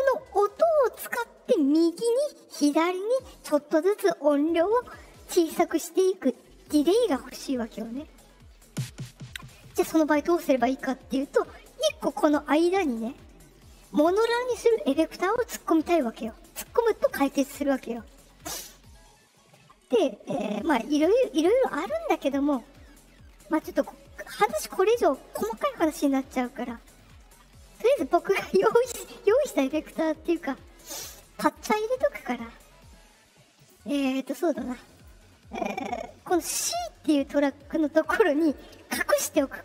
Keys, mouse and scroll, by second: 17.7 click, 33.5 click, 34.9 click, 38.4 click.